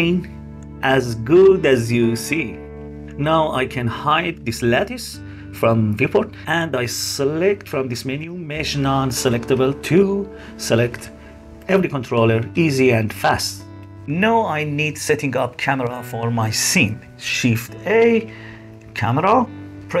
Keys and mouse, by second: 4.3 middle click, 5.1 middle click, 5.8-8.6 middle drag, 8.9 middle drag, 9.1 click, 9.7 click, 11.3 g, 12.9 g, 13.5-14.0 drag, 17.8 shift+a.